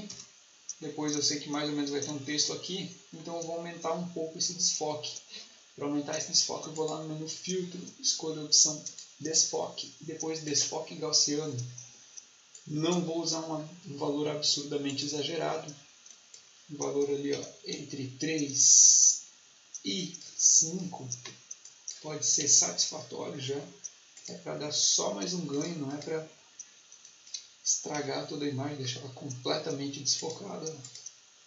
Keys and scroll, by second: 0.0 Return, 17.2 3, 18.2 Tab, 22.3 5, 27.8 3.